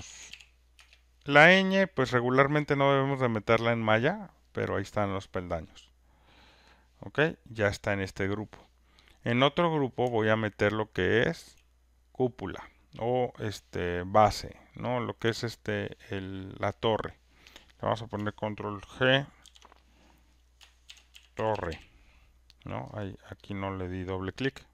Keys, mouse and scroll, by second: 0.0-0.8 typing, 5.0 click, 6.8 click, 7.4 click, 9.7 click, 11.3 shift+click, 15.0 click, 15.6 shift+click, 19.4 ctrl+g, 20.6-22.2 typing, 23.5 click.